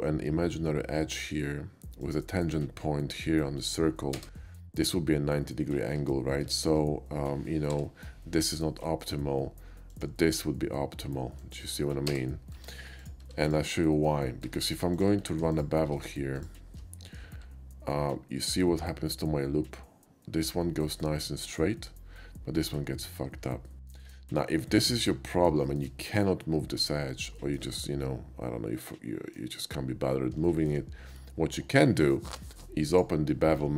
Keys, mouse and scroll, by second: 2.0 click, 4.2 space, 6.0 ctrl+z, 6.6 ctrl+z, 7.7 k, 9.9 click, 11.4 click, 11.7 right click, 12.1 space, 12.6 Tab, 12.6 space, 13.0 click, 13.3 x, 13.5 click, 14.0 middle click, 14.3 middle click, 14.5 Tab, 14.9 click, 15.5 alt+shift+click, 16.3 click, 17.1 ctrl+b, 23.7 shift+middle click, 24.1 KP_5, 24.6 middle click, 25.0 middle click, 25.7 shift+middle click, 27.4 shift+middle click, 27.8-29.4 shift+middle drag, 30.5 middle click, 32.9 click.